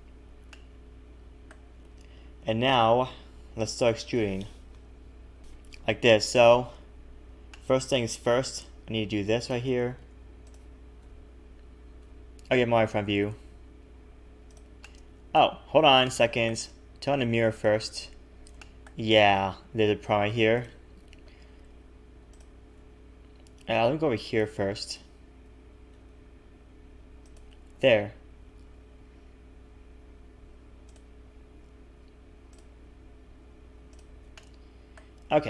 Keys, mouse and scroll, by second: 0.5 shift+middle click, 2.7 middle click, 6.0 KP_1, 7.5 shift+middle click, 8.7 e, 11.0 KP_1, 12.0 KP_1, 13.0 r, 14.8 middle click, 17.7 middle click, 17.7 click, 18.3-18.6 scroll down 3, 18.6 shift+middle click, 19.1 a, 19.3 a, 20.6 click, 21.2-22.2 scroll up 3, 22.3 alt+shift+click, 24.1 click, 25.9 g, 27.7-28.3 scroll down 1, 28.3 scroll down 2, 28.3 a, 28.4 a, 30.9 click, 32.5 click, 32.9 scroll up 1, 33.7 scroll up 3, 33.9 alt+shift+click, 34.3 middle click.